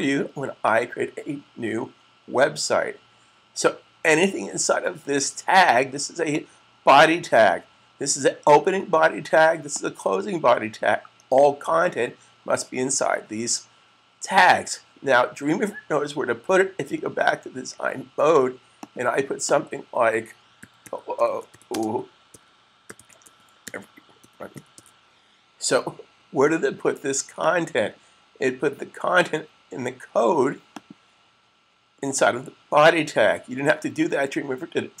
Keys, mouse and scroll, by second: 6.1 click, 9.6 click, 18.6 click, 20.4-25.1 typing, 27.1 click, 30.6 click.